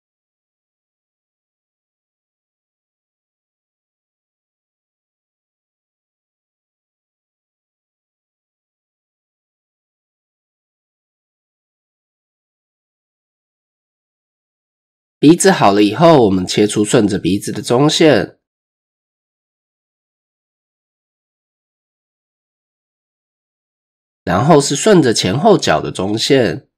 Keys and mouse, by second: 0.6 click, 1.8 click, 3.0 ctrl+z, 3.4 click, 5.4 click, 5.8-6.8 drag, 7.5 click, 9.5 click, 9.9-11.0 drag, 11.6 shift+middle click, 12.5 click, 13.2 Tab, 14.9 Tab, 15.4 shift+click, 16.8 ctrl+r, 23.2 click, 24.8 ctrl+r.